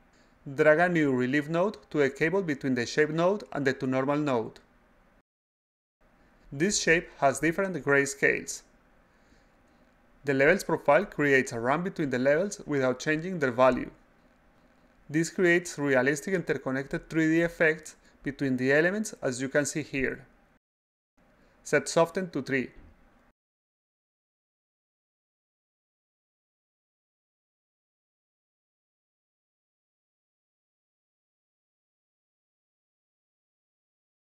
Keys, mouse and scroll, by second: 1.5 click, 2.7-4.4 drag, 4.9 click, 5.9 click, 10.1 click, 12.6 click, 13.7 click, 14.2 click, 14.5 click, 14.9 click, 15.2 click, 15.6 click, 16.2 click, 16.5 click, 17.8-22.7 drag, 23.7 click, 25.1-28.0 drag, 29.4 click, 30.5-32.1 drag, 32.7 click, 33.5 click.